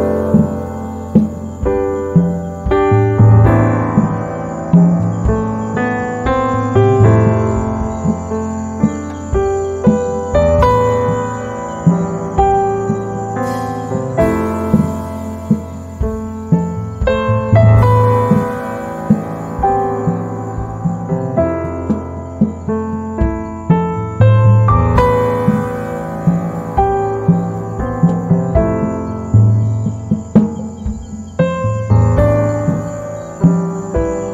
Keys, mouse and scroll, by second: 9.3-15.5 drag, 15.5 z, 15.6 right click, 16.1 space, 20.2 space, 20.5 shift+click, 24.3 z, 24.5-28.5 drag, 28.7 F7, 29.5 ctrl+click, 30.3 space, 30.5-34.3 drag.